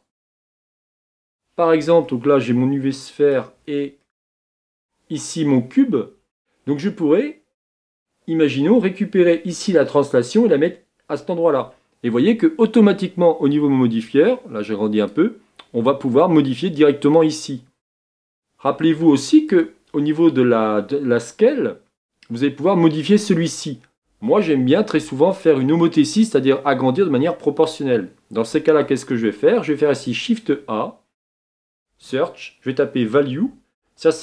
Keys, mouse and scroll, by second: 11.2 click, 14.1-34.2 drag.